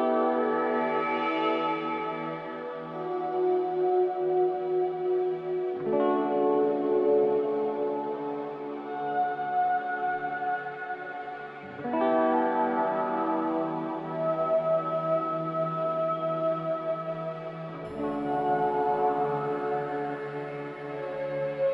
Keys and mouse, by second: 0.6 shift+click, 1.1-1.5 middle drag, 4.6 middle click, 10.7-11.5 middle drag, 15.3 shift+click, 16.3 shift+click, 18.3 shift+middle click, 21.0-21.5 shift+middle drag.